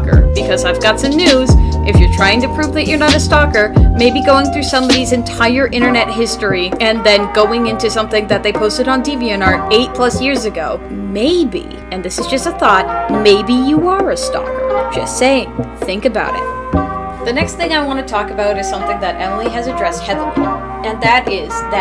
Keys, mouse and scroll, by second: 4.3 right click, 4.9 right click, 17.8 space, 18.3 space, 21.3 space.